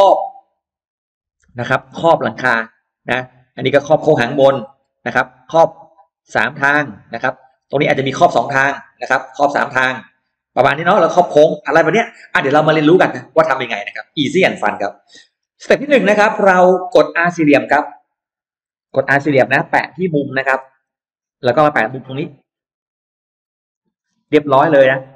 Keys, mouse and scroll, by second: 0.7 click, 1.9 click, 2.5 click, 3.3 click, 4.5 click, 5.3-6.5 drag, 7.5 click, 8.1 click, 9.1 click, 9.9 click, 10.9 click, 13.9 right click, 14.1 right click, 14.5 scroll down 2, 15.0 middle click, 15.4-16.4 scroll up 4, 15.5 middle click, 16.3 middle click, 16.6-16.9 scroll down 2, 16.9 middle click, 17.1 scroll up 2, 17.3 scroll down 2, 18.1-18.9 scroll up 4, 20.0 click, 20.3-21.1 scroll down 2, 21.4-22.0 scroll up 2, 23.5 click, 23.8-25.0 scroll down 2, 24.2 space, 24.5 middle click, 25.0 click.